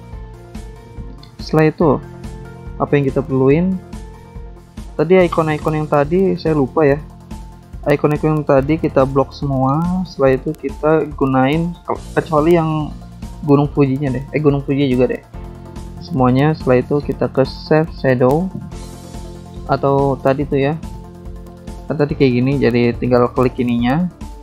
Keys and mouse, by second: 0.1 click, 0.2 click, 1.8 click, 1.9 click, 2.6 click, 2.7 click, 8.2 Escape, 9.8 click, 9.9 click, 10.6 click, 10.6 click, 12.9 click, 13.5 ctrl+click, 14.4 ctrl+click, 15.2 ctrl+click, 16.2 ctrl+click, 17.1 ctrl+click, 17.9 ctrl+click, 18.7 ctrl+click, 23.4 ctrl+click.